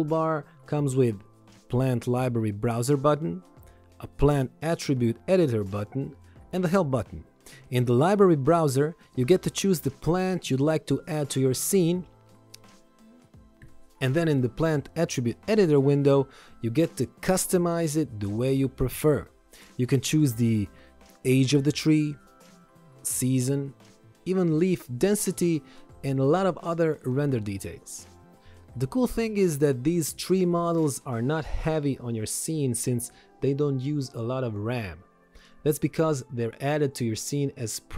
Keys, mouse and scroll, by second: 16.0 click, 26.7 Escape, 30.4 ctrl+1.